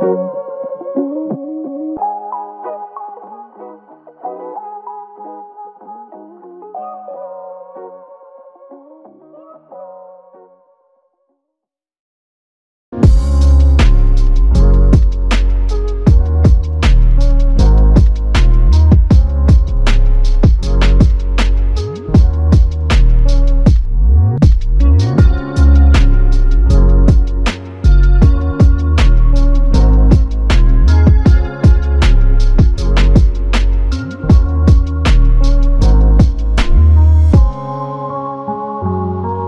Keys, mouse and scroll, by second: 2.8 alt+click, 5.7 double click, 22.9 f, 25.4 shift+click, 27.6 shift+click, 28.6 alt+click, 29.6 alt+click, 30.7 g, 31.7 typing, 33.3 double click, 38.3 typing.